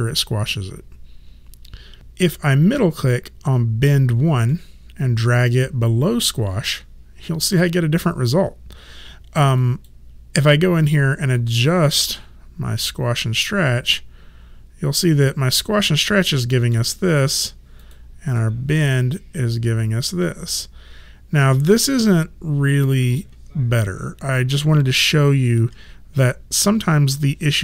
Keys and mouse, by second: 2.0 click, 3.0 click, 4.5 middle click, 9.6 click, 12.2 middle click, 17.8 click, 18.4 middle click, 25.6 ctrl+z.